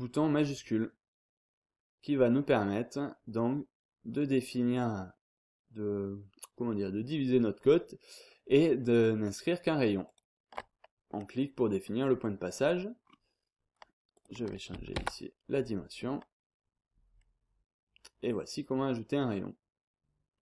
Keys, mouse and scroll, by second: 10.0 shift+click, 11.0-11.5 scroll up 2, 11.5 scroll down 2, 11.8-12.4 scroll up 2, 13.0-13.6 scroll down 2, 14.1 click, 14.9 5, 15.9 scroll down 2, 16.2-16.6 scroll up 2, 16.6-17.2 scroll down 2, 17.7-18.2 scroll down 2, 18.2-18.8 scroll up 2, 19.5-19.9 scroll down 1, 19.9-20.4 scroll up 1.